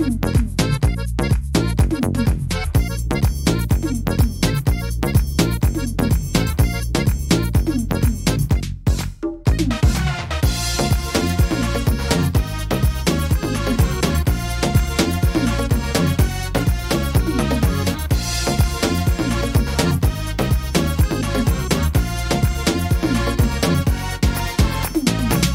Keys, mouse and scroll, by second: 1.1 ctrl+r, 3.7 middle click, 4.1 right click, 5.6 click, 6.4 right click, 6.7 shift+right click, 7.2 middle click, 8.1 w, 9.2 e, 10.3 middle click, 12.2-13.0 scroll down 5, 12.8 middle click, 13.2 scroll up 4, 13.5 middle click, 14.0-14.8 scroll down 5, 14.6 middle click, 15.2 shift+middle click, 15.5 scroll up 4, 15.9 middle click, 16.2-17.0 scroll down 4, 16.9 middle click, 17.3 shift+middle click, 17.8 scroll up 2, 18.7 a, 19.4 right click, 20.4 l, 21.8 s.